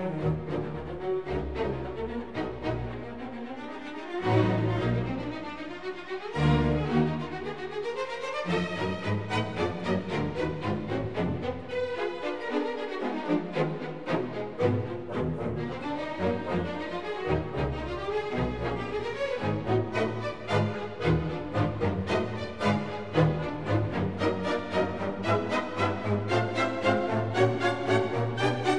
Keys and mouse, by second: 1.9 i, 2.5 click, 3.5-4.7 drag, 6.3 e, 6.8 click, 8.0-9.3 drag, 8.7 KP_1, 10.2 click, 11.0 ctrl+shift+click, 12.2 i, 12.8 click, 13.7-14.9 drag, 15.7 e, 16.2 click, 17.5-19.1 drag, 18.5 KP_1, 20.5 click, 21.0 shift+click, 21.8 i, 22.2 click, 23.1-24.1 drag, 24.9 e, 25.3 click, 26.3-28.3 drag, 27.5 KP_1.